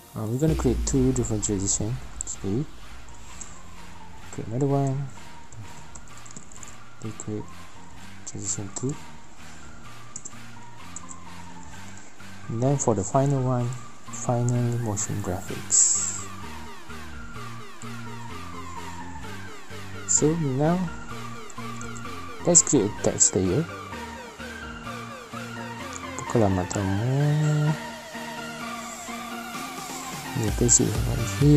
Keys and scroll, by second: 2.6 ctrl+n, 3.8-8.6 typing, 8.4 Left, 11.7 ctrl+n, 15.7-20.5 typing, 27.9-31.0 typing.